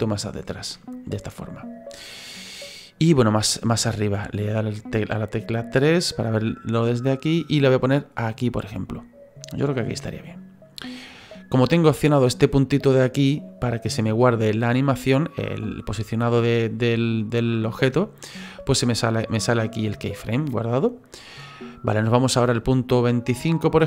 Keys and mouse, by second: 1.0 middle click, 4.1 KP_3, 6.1 click, 16.1 middle click, 17.4 middle click, 21.3 middle click, 22.9 click.